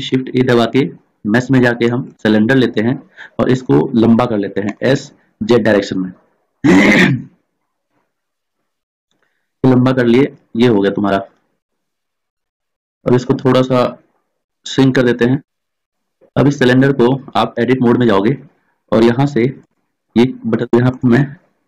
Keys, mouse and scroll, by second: 0.1 shift+a, 4.8 s, 14.6 s, 16.5 middle click, 17.7 Tab, 20.7 middle click, 21.1 right click.